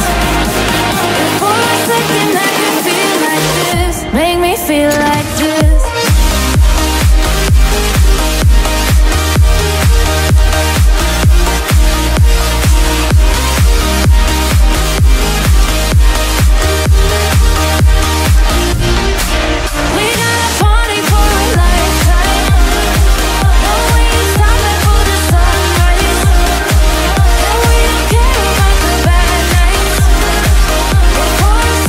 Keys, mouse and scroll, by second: 0.1 click, 3.8-5.4 scroll up 3, 13.6 click, 15.7 click, 16.8 click, 18.6 click, 22.0 shift+click, 23.7 shift+click, 25.8 shift+click, 28.9 click, 29.6 click, 30.7 click.